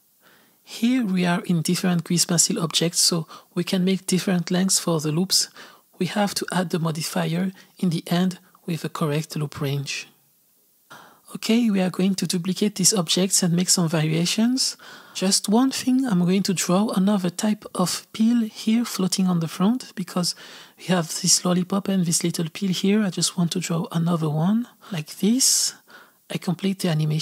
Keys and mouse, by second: 0.0-2.3 typing, 0.3 click, 0.5 click, 0.8 click, 0.8 shift+middle click, 1.2 click, 1.8 click, 1.9 click, 2.2 click, 2.5 click, 3.0 Down, 3.1 click, 3.2 Up, 3.2 click, 3.5 click, 3.8 click, 3.9 z, 4.0 click, 4.1 z, 4.3 click, 4.5 click, 4.8 click, 4.9 z, 5.1 click, 5.5 click, 5.8 click, 6.0 click, 6.4 click, 6.7 click, 6.8 z, 6.9 s, 7.1-10.0 drag, 10.1-13.5 drag, 13.5 space, 15.8 space, 18.8 click, 19.4 z, 19.5 click, 19.8 z, 19.9 click, 20.5 click, 20.7 click, 22.0 click, 22.9-24.5 drag, 24.5 KP_3, 25.0 s, 25.2 g, 25.5 g, 25.7 click, 25.9 Left, 26.2 click, 26.5 click, 27.1 space.